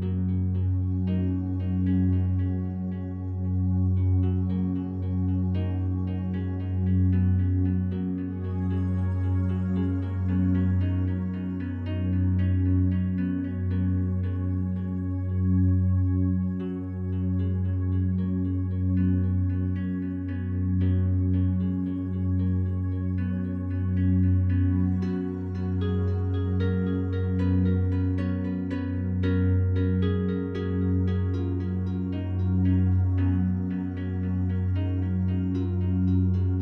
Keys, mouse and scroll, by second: 3.0 right click, 3.8 Tab, 4.6 right click, 5.8 3, 6.3 right click, 9.0 right click, 9.8-11.1 alt+drag, 11.1 shift+right click, 15.1 click, 15.9 e, 17.8 click, 19.1 a, 20.1 a, 23.1 right click, 24.0 a, 25.3 ctrl+r, 30.0 click, 36.2 click.